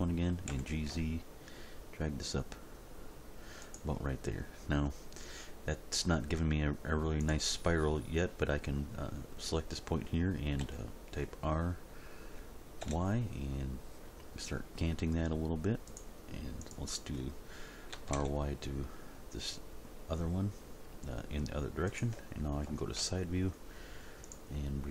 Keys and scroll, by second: 0.5 g, 0.9 z, 10.6 r, 12.8 y, 17.9 r, 18.2 y, 22.7 End, 23.0 Page_Down.